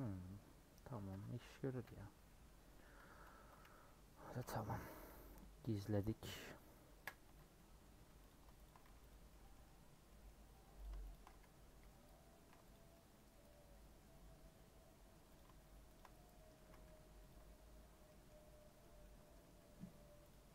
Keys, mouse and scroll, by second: 0.8 scroll down 3, 1.1 Tab, 1.8 /, 2.0 scroll down 2, 2.2 middle click, 2.8 Tab, 3.1 Tab, 3.8 /, 4.2-4.8 scroll down 2, 4.3 middle click, 4.8 middle click, 5.3 h, 5.5 scroll down 4, 5.7 middle click, 6.3 click, 6.9 KP_Decimal, 7.2 Tab, 7.6 middle click, 7.9 3, 8.3 click, 9.1 x, 9.3-10.8 middle drag, 10.8 click, 11.8 ;, 12.7 alt+click, 12.9 middle click, 13.5-15.3 middle drag, 15.3 click, 16.3 middle click, 16.6 a, 17.3 u, 18.6 middle click, 18.8 scroll up 2, 19.0 middle click, 19.4 scroll down 2, 19.5 middle click, 20.3 click.